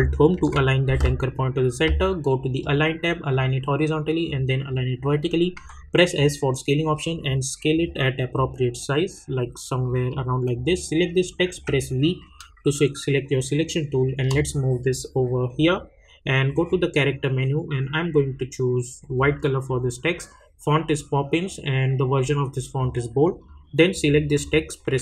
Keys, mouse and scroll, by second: 0.3 ctrl+alt+Home, 5.5 s, 6.1-10.5 drag, 11.5 v, 12.2-16.6 drag, 19.0 click, 23.4 click.